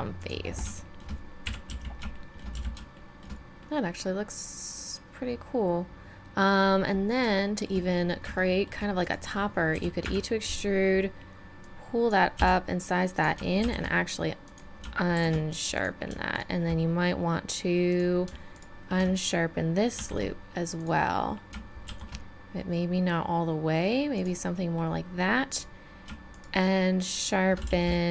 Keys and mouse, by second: 1.4 KP_1, 1.7 z, 2.6 z, 5.7-7.4 middle drag, 8.6-9.7 drag, 9.7 e, 11.6-13.2 drag, 12.4 s, 13.6 shift+e, 15.1 shift+e, 18.3 click, 19.9 shift+e, 21.9 shift+e, 25.5-27.5 right drag, 27.7 z.